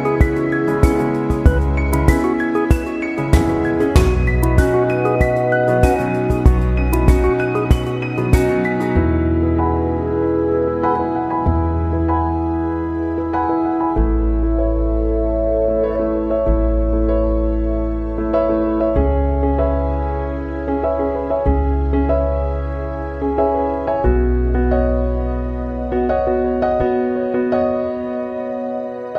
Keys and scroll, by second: 8.3 ctrl+c, 8.5 ctrl+v, 27.8 s.